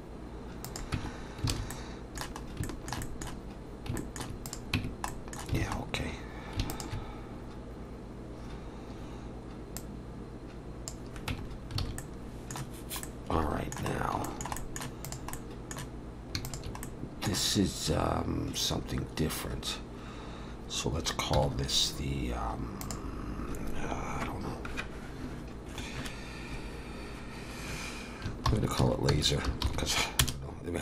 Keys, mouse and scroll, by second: 1.0 Tab, 1.1-1.7 scroll down 3, 1.5 alt+a, 1.7 middle click, 2.4 scroll up 1, 2.6 shift+middle click, 3.1 middle click, 4.0 shift+middle click, 4.5 click, 4.8 Tab, 5.1 middle click, 5.6 alt+a, 5.8 scroll up 2, 6.7 alt+shift+click, 9.8 click, 11.3 Tab, 11.5-12.0 scroll down 2, 11.8 alt+a, 12.0 middle click, 14.0 middle click, 14.0 scroll down 2, 14.2 shift+middle click, 14.3 shift+middle click, 14.6 middle click, 15.0 click, 15.3 middle click, 16.5 shift+click, 16.8 middle click, 21.4 m.